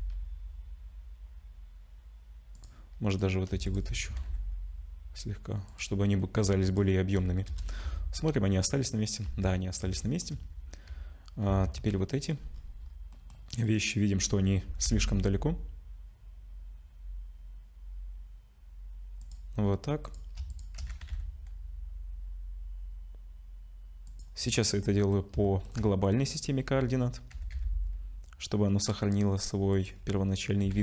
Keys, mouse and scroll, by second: 3.1 click, 3.7 shift+click, 4.1 g, 6.7 click, 7.5 KP_0, 7.8 scroll up 1, 7.8 z, 8.6-9.2 scroll down 1, 9.2 z, 9.6 scroll down 5, 10.0 shift+middle click, 10.5 z, 11.5 z, 11.9 middle click, 12.5-13.5 scroll down 5, 13.6 click, 14.4 scroll up 3, 14.7 g, 20.0 click, 20.5 shift+click, 20.9 g, 24.6 middle click, 25.4 shift+middle click, 25.8-26.8 scroll up 4, 26.8-27.3 scroll down 2, 27.3 g, 30.6 g.